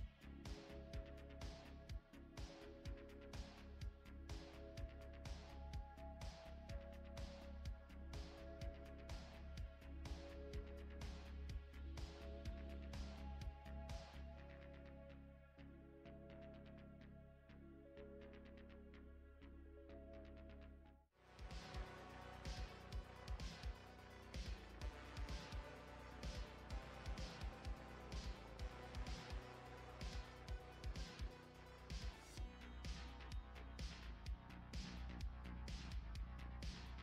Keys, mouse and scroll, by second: 0.3 click, 1.2 right click, 3.9 click.